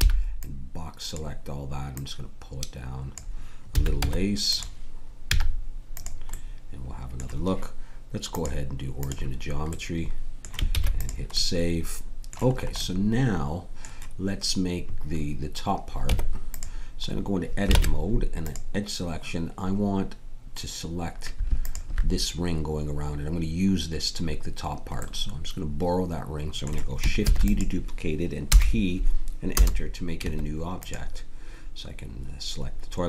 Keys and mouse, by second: 0.1 b, 1.9-4.0 drag, 3.7 a, 4.0 Tab, 5.3 z, 9.7 click, 10.7 ctrl+s, 16.1 Tab, 17.7 ctrl+Tab, 27.3 shift+d, 28.4 p, 30.2 Tab.